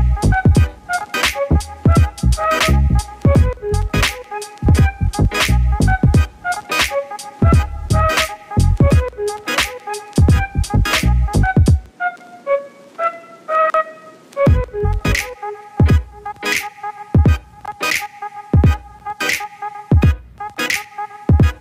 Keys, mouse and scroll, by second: 3.6-7.9 drag, 10.1-14.6 drag, 15.1-17.1 drag.